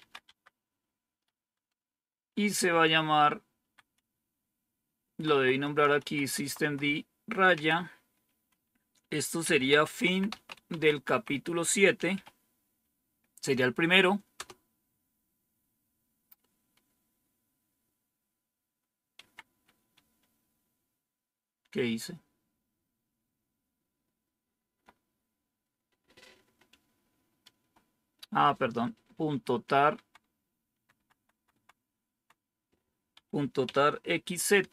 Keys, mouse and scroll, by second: 0.0-0.4 typing, 1.7 Left, 2.3-3.9 Left, 3.9 Right, 5.0 Right, 7.4 Right, 9.3-9.9 Right, 9.7-12.6 typing, 14.3 typing, 19.1 Home, 20.1 Left, 20.8 Left, 20.8-24.7 Left, 26.6 Right, 27.3 Right, 28.3 Right, 29.1-33.0 Right.